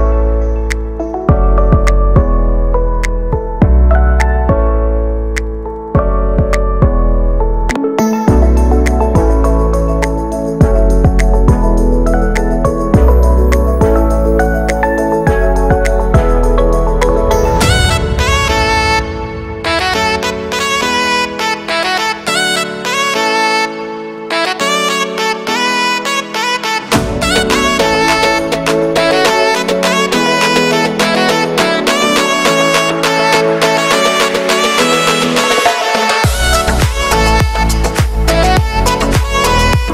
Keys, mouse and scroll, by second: 0.0 g, 2.5 scroll down 3, 2.6 middle click, 3.5 Tab, 3.7 scroll down 4, 3.8 shift+middle click, 4.3 z, 4.8 scroll down 2, 4.9 shift+middle click, 5.6 scroll up 1, 5.7 z, 5.9 shift+middle click, 9.2 Tab, 9.6 a, 11.5 u.